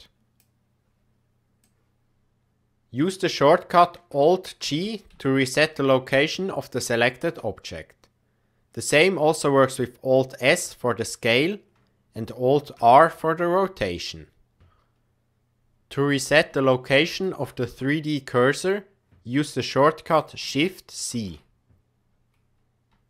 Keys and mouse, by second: 4.6 alt+g, 5.4-7.2 shift+middle drag, 10.4 alt+s, 12.7 alt+r, 17.0 shift+right click, 21.1 shift+c.